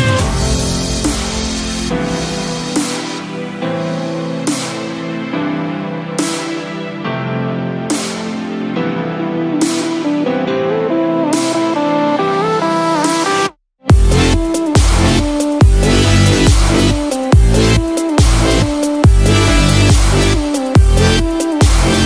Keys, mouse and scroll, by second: 19.0 click.